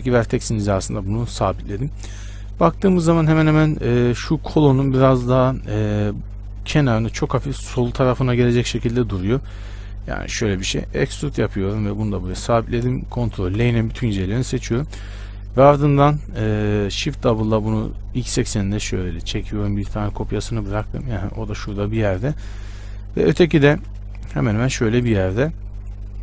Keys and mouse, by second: 5.5 KP_1, 7.9 KP_1, 9.1 z, 11.2 e, 13.7 ctrl+l, 17.4 shift+d, 24.4 shift+d.